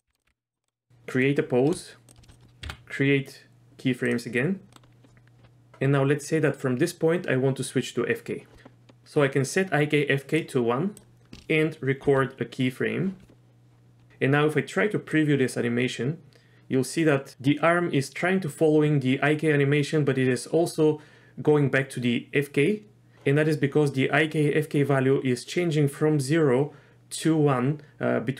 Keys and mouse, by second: 0.1 r, 0.2 r, 0.6 middle click, 2.1 shift+click, 2.6 i, 4.7 middle drag, 10.4 click, 12.1 i, 15.1-23.1 drag.